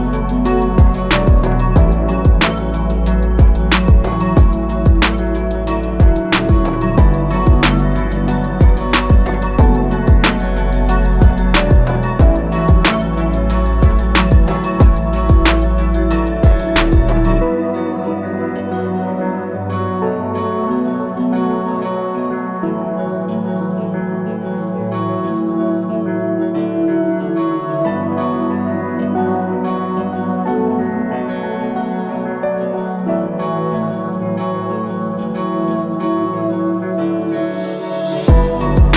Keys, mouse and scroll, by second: 1.1 right click, 2.1 click, 2.7 click, 4.1 click, 7.9 click, 9.1 click, 9.2 double click, 10.1-11.8 typing, 12.6 right click, 13.9 click, 14.6 click, 15.2 click, 16.9-17.6 scroll down 4, 17.8 alt+middle click, 19.2-23.2 drag, 23.8 click, 24.7 click, 25.4 click, 25.9 click, 28.0 click, 28.9 click, 29.4 click, 30.5 click, 31.5 click, 35.7 click.